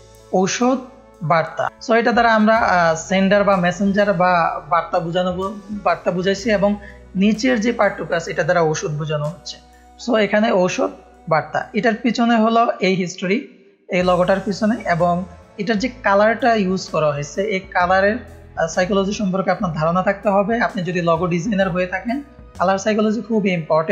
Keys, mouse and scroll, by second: 0.3 click, 1.1 click, 1.9 click, 3.6 click, 6.8 click, 9.9-11.8 drag, 12.1 click, 13.2 click, 14.3 click, 17.4 click.